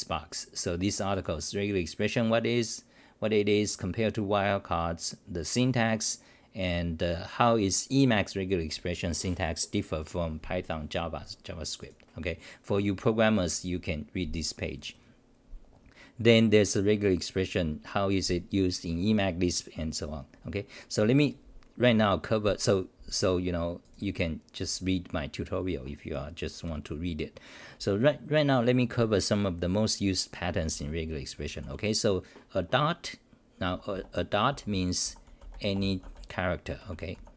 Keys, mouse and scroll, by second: 21.9 Home, 21.9-24.8 scroll down 2, 31.6 u, 33.7 Home, 33.9-35.5 typing, 35.1 scroll, 36.7-37.3 typing.